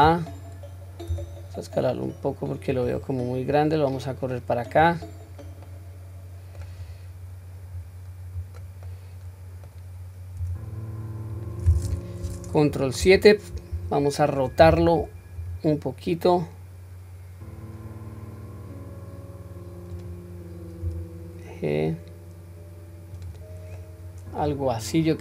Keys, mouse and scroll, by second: 1.1 s, 3.5-4.8 drag, 5.3-5.7 scroll down 1, 5.7 middle click, 6.8-7.3 scroll down 1, 7.8 scroll down 2, 8.9-9.7 middle drag, 10.4 s, 13.0 ctrl+KP_7, 15.4 r, 23.8-24.5 middle drag, 24.8-25.2 middle drag.